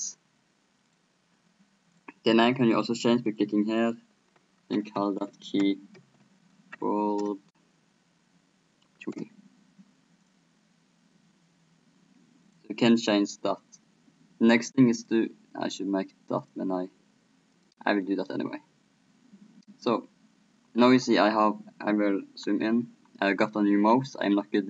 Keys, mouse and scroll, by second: 0.9-4.9 drag, 10.2-11.9 drag, 12.5-14.1 drag, 14.1 middle click, 14.9-19.4 drag.